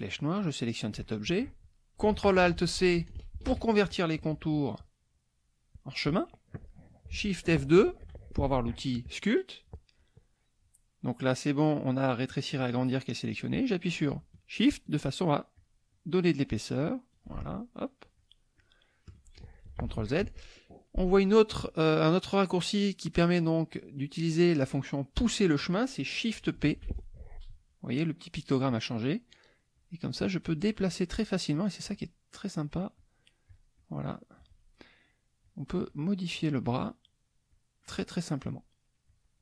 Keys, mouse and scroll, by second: 0.4 click, 7.8 shift+F2, 14.9 shift+click, 15.6 shift+click, 15.9 shift+click, 16.8 shift+click, 17.5 shift+click, 18.1 shift+click, 18.6 shift+click, 19.8 ctrl+z, 26.6 shift+p, 29.7 click, 30.1 click, 30.4 click, 30.7 click, 31.5 click, 31.9 click, 32.4 click, 33.0 click, 33.5 click, 33.8 click, 35.4 click, 36.3 click, 36.7 click, 37.1 click, 37.5 click, 39.1 click.